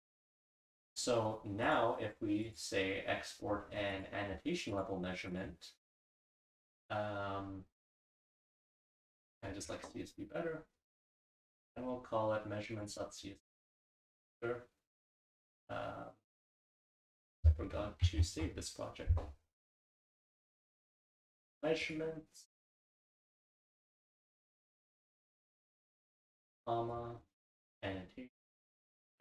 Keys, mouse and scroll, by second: 0.7 drag, 0.7-1.5 scroll down 1, 1.5-2.6 scroll down 1, 1.6 click, 17.2 click, 18.9 ctrl+s, 19.8 click.